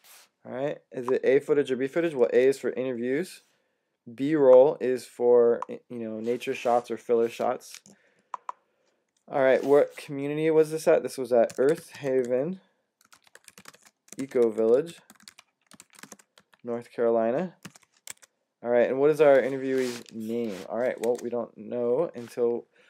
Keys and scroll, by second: 2.3 a, 11.1-17.5 typing, 17.9 Tab, 20.6-22.4 typing.